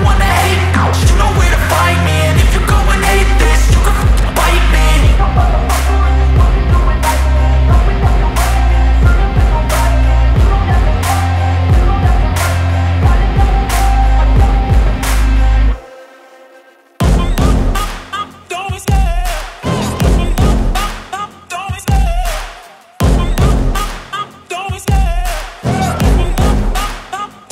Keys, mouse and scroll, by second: 3.8-5.0 drag, 5.8 click, 10.5 ctrl+z, 14.8 click, 17.2 click, 18.4 click, 19.9 scroll down 2, 20.2-20.8 scroll, 22.3-22.9 scroll, 23.8-24.2 scroll, 25.2 click, 27.0 click.